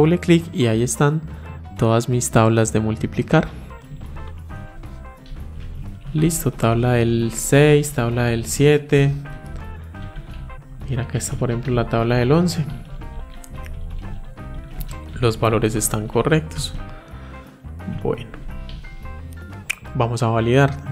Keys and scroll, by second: 11.1 ctrl+Up.